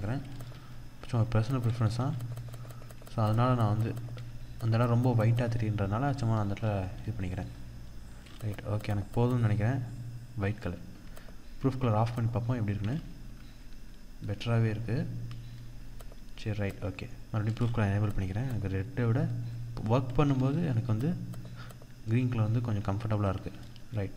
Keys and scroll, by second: 0.0 ctrl+0, 19.8 ctrl+=, 23.1 ctrl+0.